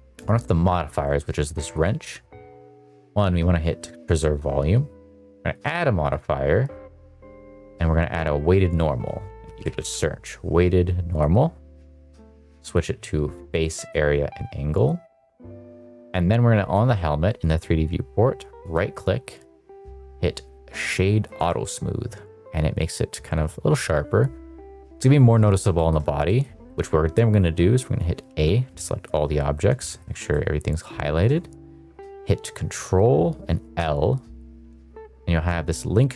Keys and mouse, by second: 1.7 click, 3.8 click, 5.5-11.2 drag, 12.6-13.9 drag, 18.5-21.5 right drag, 25.7 shift+middle click, 26.2 middle click, 26.6 middle click, 28.2 a, 29.8 shift+middle drag, 30.2-31.1 shift+middle drag, 33.7 ctrl+l.